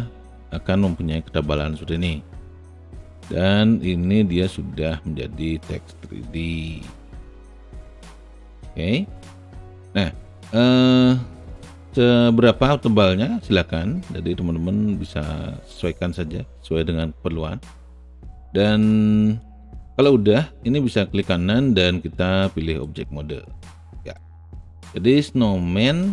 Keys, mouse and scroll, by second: 0.0-1.6 alt+drag, 2.0 alt+middle click, 2.3-3.4 alt+right drag, 4.8-5.8 alt+right drag, 6.0 alt+middle click, 6.6-10.9 alt+drag, 12.1 alt+middle click, 14.1-16.0 drag, 17.1-18.1 alt+drag, 18.1 alt+middle click, 18.9 alt+click, 21.3-22.8 alt+right drag, 24.0 alt+right click.